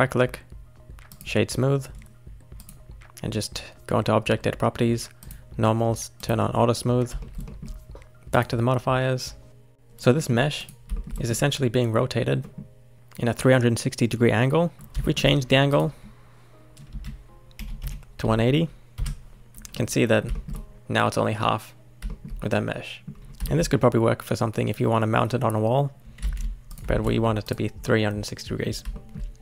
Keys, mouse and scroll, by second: 2.6 click, 5.2-6.2 drag, 7.2-8.3 shift+middle drag, 8.3 click, 10.2 middle click, 10.6 click, 10.9-12.9 shift+middle drag, 14.7 shift+middle click, 15.7-18.8 drag, 19.7-23.1 middle drag, 23.1 scroll down 1, 23.2-23.5 scroll up 2, 23.5-26.2 shift+middle drag, 26.2 ctrl+z, 26.7 click, 26.9 shift+middle click, 27.4 click, 27.8-29.4 middle drag.